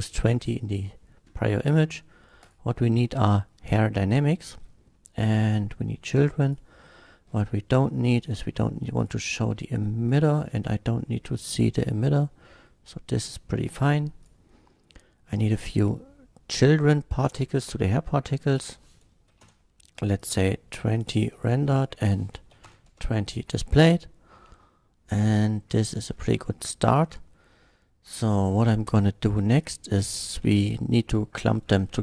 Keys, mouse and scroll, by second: 0.1 scroll up 1, 2.4 click, 3.0-3.6 middle drag, 5.5 click, 6.5 click, 7.2 scroll down 1, 8.2 click, 9.0 click, 10.1 click, 11.4 click, 11.8-13.1 middle drag, 14.8-15.8 middle drag, 18.5 click, 19.3 KP_2, 19.5 KP_0, 20.2 click, 20.9 click, 21.3 click, 22.8 KP_0, 22.9 Return, 23.8-26.0 middle drag, 26.5-26.9 middle drag, 29.5 click.